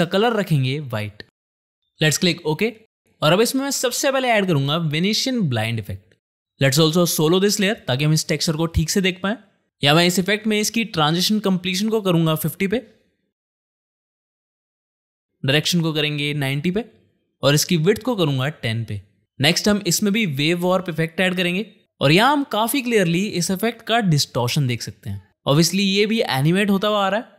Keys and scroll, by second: 5.0-6.0 typing, 14.1 5, 14.5 0, 14.9 Return, 16.2-17.1 typing, 18.2-20.9 typing, 19.4 ctrl+space, 20.9 Down, 21.4 Return.